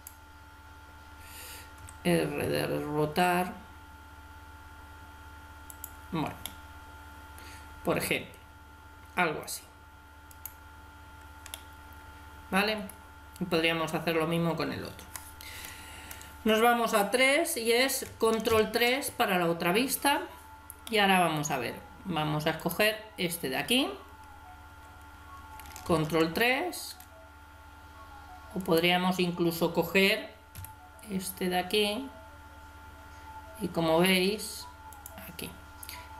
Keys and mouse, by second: 1.8 r, 6.4-8.2 middle drag, 10.3-11.6 right drag, 11.6-12.8 middle drag, 16.4 KP_3, 18.5 ctrl+KP_3, 22.0 middle click, 22.6 right click, 24.7 KP_3, 25.9 ctrl+KP_3, 30.6 g.